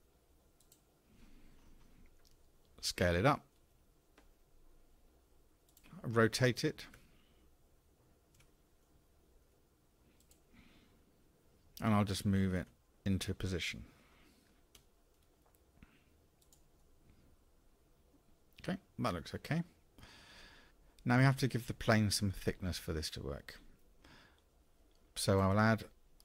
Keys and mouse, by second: 3.6 s, 7.0 r, 12.7 g, 16.8-20.7 middle drag.